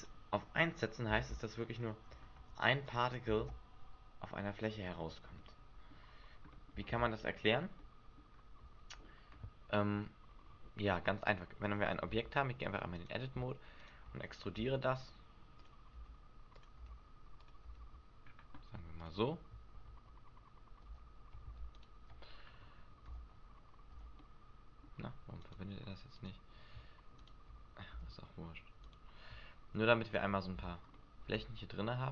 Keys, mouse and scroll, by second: 0.0 click, 1.2 alt+a, 2.4 Escape, 2.8 click, 3.3 alt+a, 5.1 Escape, 5.3 middle click, 6.5 middle click, 6.8 alt+a, 7.7 middle click, 10.0 Escape, 12.0 Tab, 12.9 right click, 13.8 shift+right click, 14.6 e, 15.7 click, 15.9 e, 16.7 click, 16.8 e, 17.5 click, 17.7 e, 19.1 click, 21.7 alt+shift+right click, 23.1 f, 23.9 f, 24.2 middle click, 25.4 right click, 26.1 right click, 27.1 shift+right click, 27.9 f, 28.8 right click, 30.0 shift+right click, 30.6 f, 30.9 middle click.